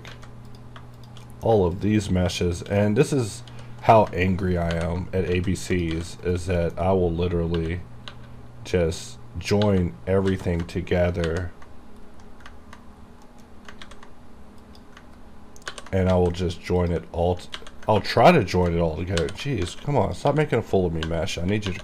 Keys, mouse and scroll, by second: 0.2 alt+a, 0.6 click, 1.1 shift+click, 1.4 shift+middle click, 1.8 shift+click, 2.5 shift+click, 2.9 middle click, 3.6 g, 4.0 right click, 5.5 alt+a, 5.8 click, 6.1 g, 6.4 right click, 6.7 middle click, 7.7 2, 9.7-10.4 typing, 11.4 ctrl+j, 12.3 scroll down 1, 13.2 scroll down 1, 13.4 middle click, 13.9 ctrl+a, 14.8 click, 15.8 ctrl+j, 16.2 alt+a, 16.9 click, 17.7 a, 18.2 shift+click, 19.3 ctrl+j, 19.8 alt+a, 20.4 g, 20.7 right click, 21.1 2.